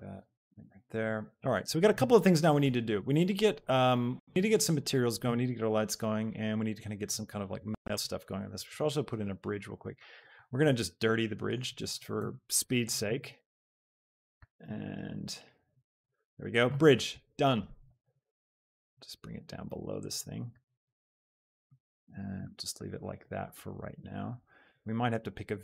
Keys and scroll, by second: 0.5 y, 8.6 shift+a, 10.4 s, 10.8 z, 11.9 g, 12.3 y, 13.4 z, 14.5 s, 14.8 x, 17.8 g, 18.1 z, 20.7 y.